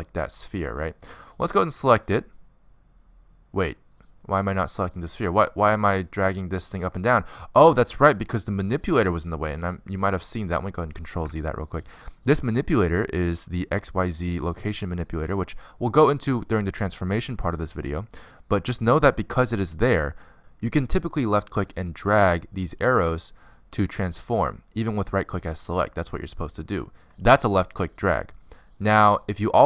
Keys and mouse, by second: 4.4 middle click, 4.9 click, 12.0 ctrl+z, 20.3 click, 20.5 middle click, 23.6 click, 24.6 click, 26.2 click, 26.9 click, 27.7 ctrl+z, 28.0 ctrl+z.